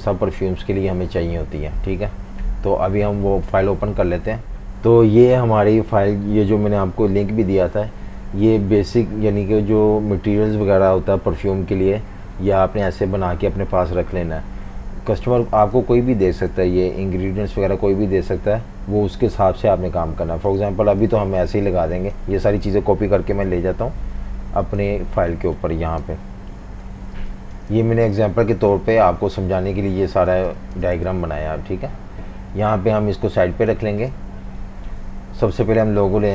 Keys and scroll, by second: 15.2 typing, 23.2 super+c, 26.0 super+-, 26.9 v, 27.1 space, 30.3 typing, 31.1 super+v.